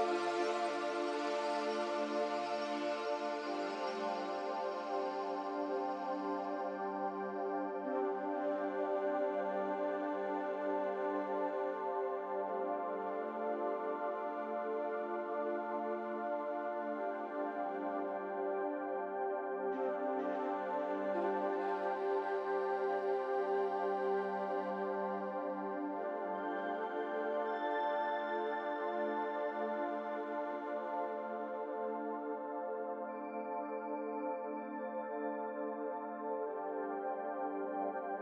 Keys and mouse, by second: 0.5 shift+click, 2.3 shift+click, 3.3 shift+click, 4.0 shift+click, 7.3-8.4 middle drag, 9.4 shift+click, 13.7 shift+click, 15.0 shift+click, 15.8-16.4 middle drag, 17.2 shift+click, 19.4 shift+click, 20.1 shift+click, 20.8-21.6 middle drag, 22.4 middle click, 24.7 g, 25.8 g, 29.2 Tab, 31.2-32.2 drag, 32.2-33.3 middle drag.